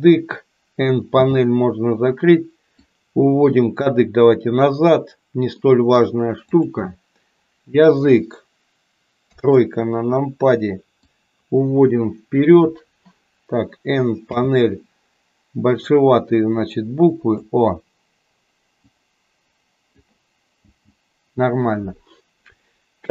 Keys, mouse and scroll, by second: 1.0 n, 2.8-4.8 drag, 5.7 middle click, 6.4 click, 9.2 KP_3, 10.9-12.8 drag, 14.2 n, 15.8-17.3 drag, 18.7-19.9 drag, 20.5 n.